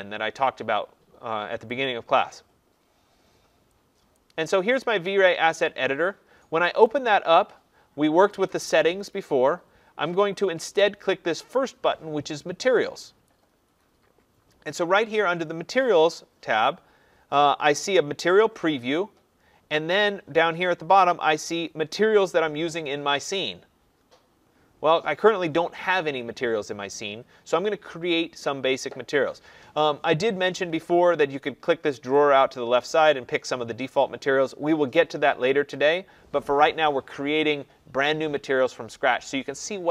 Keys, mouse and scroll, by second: 1.8 click, 4.1 click, 6.9 click, 8.4 click, 13.2 click, 32.1 click, 35.9 click.